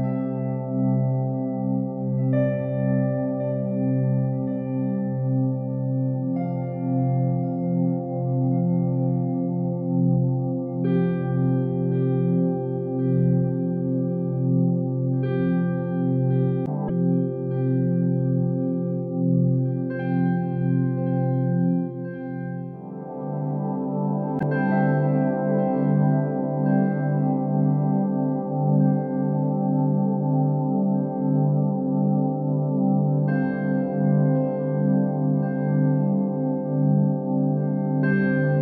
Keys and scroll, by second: 13.9 ctrl+z, 26.1 ctrl+z.